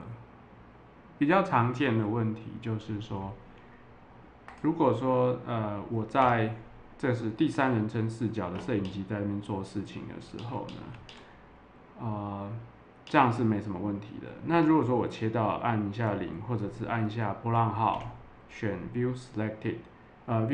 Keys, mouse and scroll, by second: 4.4 click, 8.8-10.0 middle drag, 10.8 middle click, 12.0 middle click, 12.3 middle click, 13.0 middle click, 17.9 `.